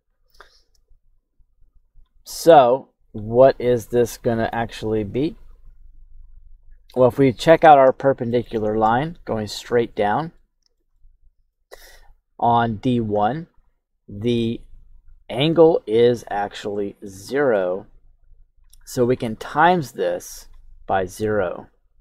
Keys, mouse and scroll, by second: 1.2 click, 2.8 click, 3.4 click, 4.0 click, 4.4 click, 5.1 click, 5.5 click, 6.0 click, 7.9 shift+middle click, 7.9-8.3 shift+scroll down 1, 8.4 middle click, 9.8-10.3 scroll up 2, 10.3 shift+middle click, 10.9 middle click, 12.6-13.0 scroll down 1, 17.1 shift+middle click, 17.5 shift+scroll up 1, 18.4 click, 18.9 click, 19.6 click.